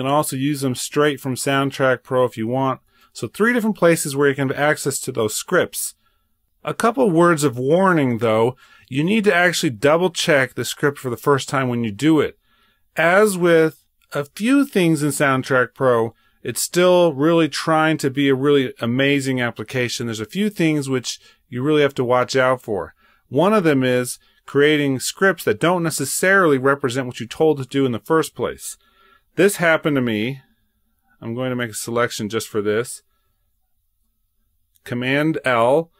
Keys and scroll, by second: 33.0 super+l.